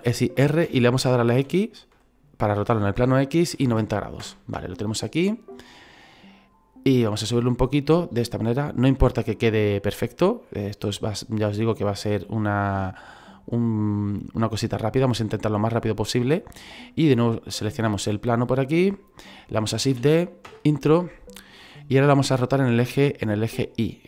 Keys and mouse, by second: 0.7 r, 1.3 x, 3.5 KP_9, 3.6 KP_0, 5.8 click, 7.0 click, 8.9 middle click, 10.5 shift+middle click, 11.5 click, 14.2 middle click, 16.6 right click, 18.0 middle click.